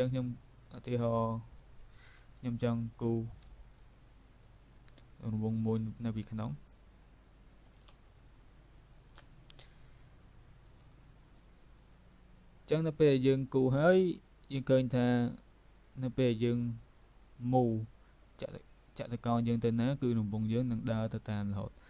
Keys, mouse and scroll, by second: 0.2 click, 2.0 v, 2.4 click, 3.5 ctrl+z, 5.4 click, 7.9 alt+click, 10.9 click, 15.9 click, 16.8 click, 20.8 click.